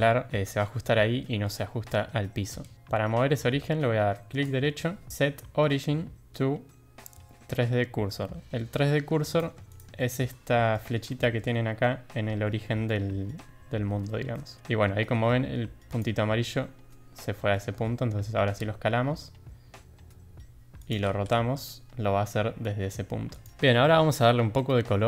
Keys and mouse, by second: 2.6 ctrl+z, 4.4-9.4 right drag, 9.7 shift+click, 9.9 shift+drag, 10.7 drag, 11.1 shift+drag, 14.3 shift+middle drag, 15.8 click, 17.5 shift+middle drag, 18.2 s, 21.0 r, 24.0 middle drag, 24.6 shift+middle drag.